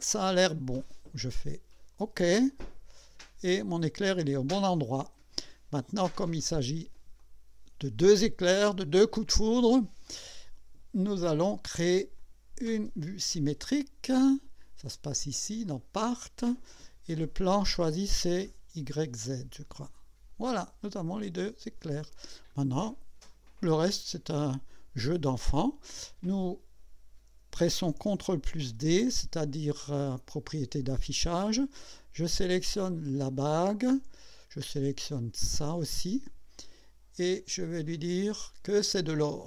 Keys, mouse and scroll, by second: 1.3 click, 2.5-3.9 drag, 4.1-5.5 drag, 5.8 click, 7.2-9.1 drag, 12.2 click, 15.7 click, 17.1 click, 18.8 click, 19.6 click, 20.8-22.2 drag, 22.5-22.9 scroll up 1, 23.3 right click, 24.1-25.3 drag, 28.8 ctrl+d, 33.1 click, 35.6 ctrl+click, 38.5 click.